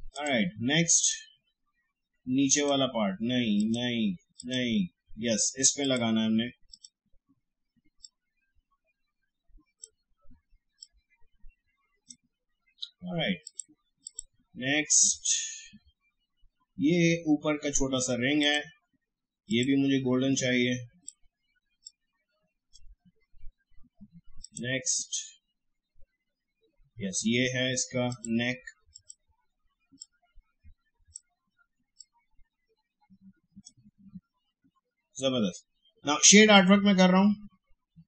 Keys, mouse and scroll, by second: 18.4-24.4 drag, 28.1-36.1 drag, 36.5 click.